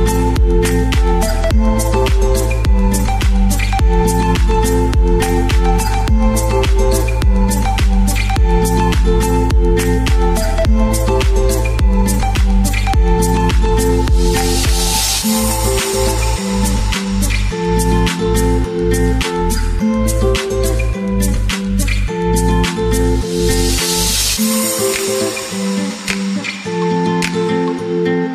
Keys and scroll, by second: 6.4 space, 9.2 shift+Page_Up, 9.4 shift+Page_Up, 17.3 shift+Page_Down, 18.2 Page_Up, 18.3 Page_Up, 18.5 Page_Up, 27.8 t.